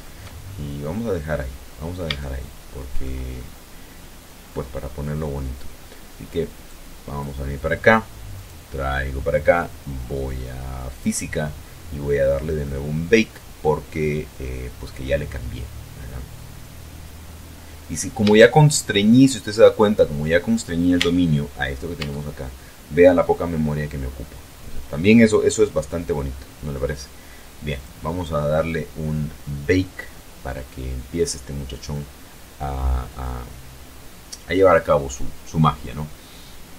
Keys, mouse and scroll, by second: 0.9 scroll down 2, 1.6 shift+middle click, 2.7-3.6 shift+scroll up 5, 6.0 click, 7.7 right click, 10.3 click, 17.8-19.0 shift+middle drag, 19.1 shift+scroll up 1, 20.3 Tab, 21.3 Tab, 27.1 click.